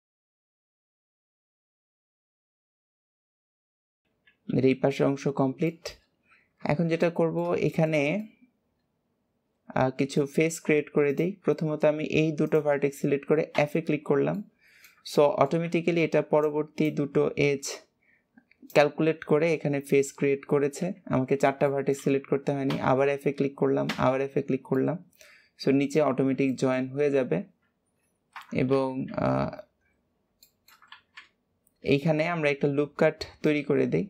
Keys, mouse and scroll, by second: 0.5 shift+middle click, 0.8 click, 1.5 shift+middle click, 1.8 click, 2.1 click, 3.1 scroll down 3, 3.4 alt+z, 3.5 middle click, 4.0 KP_1, 5.6-6.6 shift+middle drag, 6.6 alt+z, 6.9-10.2 middle drag, 10.2 scroll up 1, 11.0 scroll up 1, 11.0 click, 12.4 shift+click, 14.3-20.7 middle drag, 21.6-22.6 shift+middle drag, 22.6 f, 24.7-26.2 middle drag, 26.2 scroll down 2, 26.4-28.6 shift+middle drag, 28.6 KP_3, 29.0 alt+z, 29.8-30.3 scroll up 2, 30.3 shift+middle click, 30.8 alt+z, 31.9 shift+middle click, 32.4-33.1 scroll up 1, 33.4 shift+middle click.